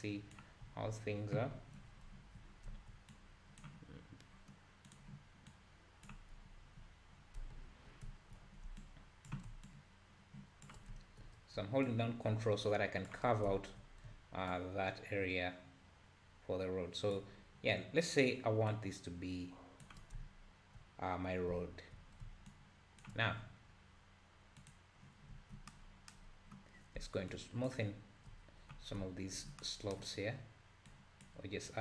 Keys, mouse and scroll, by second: 2.2 z, 3.1-4.3 drag, 4.3-4.9 scroll up 1, 4.9-6.6 drag, 6.6 z, 7.5 `, 8.0 `, 8.8-10.9 shift+drag, 10.9 `, 11.9-13.4 ctrl+drag, 13.4 scroll down 1, 13.5 `, 14.5-17.5 ctrl+drag, 18.7-20.2 ctrl+drag, 20.2 `, 21.3 scroll up 2, 21.5 `, 22.5-25.3 ctrl+drag, 25.3 `, 26.3-27.3 scroll up 1, 27.3-28.8 shift+drag, 28.8 scroll up 2, 29.0 `, 30.9-31.8 drag.